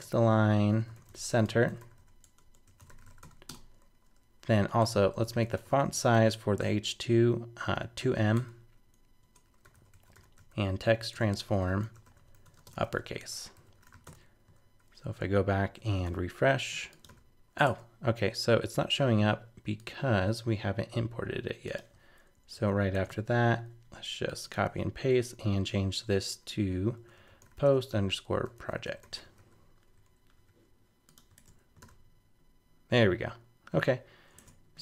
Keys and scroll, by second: 14.6 super+s, 15.0 super+Tab, 16.0 super+r, 17.6 super+Tab, 22.3 shift+super+Left, 22.5 super+c, 23.1 super+v, 31.4 super+Tab, 31.8 super+r, 34.4 super+Tab.